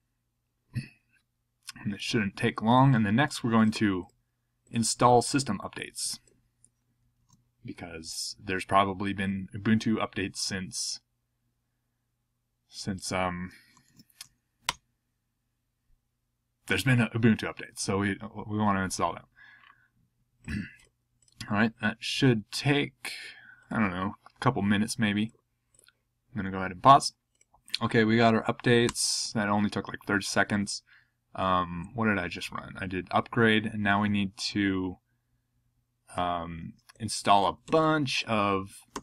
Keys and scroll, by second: 7.2 super+c, 13.9 super+v, 14.7 Return, 31.7 Down, 32.5 Up, 33.2 Down, 37.7 super+c, 38.9 super+v.